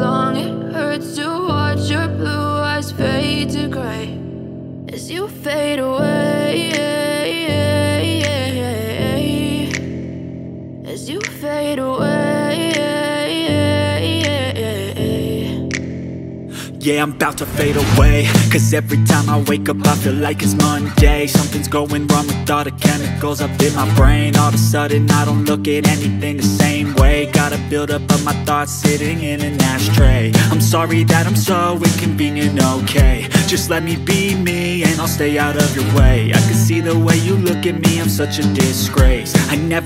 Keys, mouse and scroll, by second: 17.3 F10.